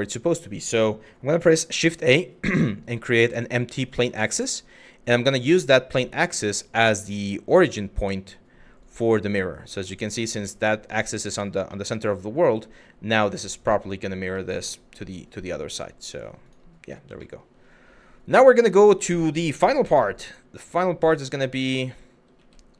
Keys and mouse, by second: 0.9 shift+a, 5.9 click, 7.1 click, 9.1 middle click, 9.5 click, 10.1-10.7 middle drag, 11.4-12.9 middle drag, 13.4 middle click, 14.1 middle click, 16.0 click, 16.8 shift+middle drag, 18.4 middle click, 19.1 KP_1, 19.8 click, 20.2 g, 22.5 z.